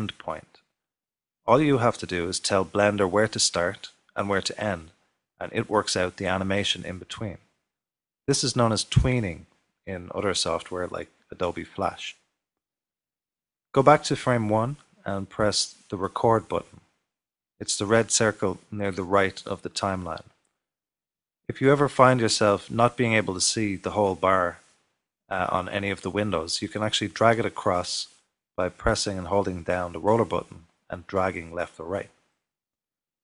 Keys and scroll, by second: 1.4 typing.